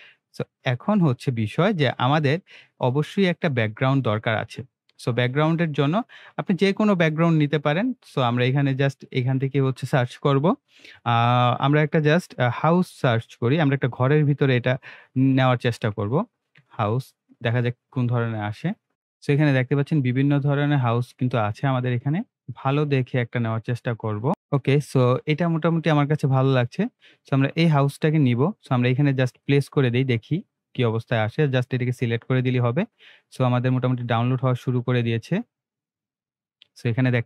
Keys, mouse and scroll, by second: 1.1 scroll up 1, 1.7-2.1 scroll down 2, 4.9 scroll up 1, 9.1 click, 11.1 BackSpace, 13.3-15.4 typing, 16.6 Return, 18.9 click, 19.0 click, 23.5 click, 29.2 click, 34.8 scroll up 1, 35.1 scroll down 1.